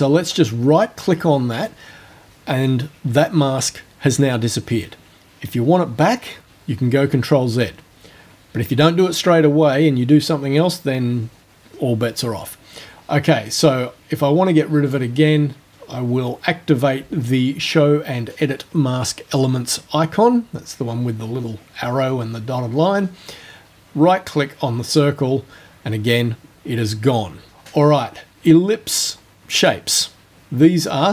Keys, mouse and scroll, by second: 14.9 click, 24.9 right click, 29.6 click.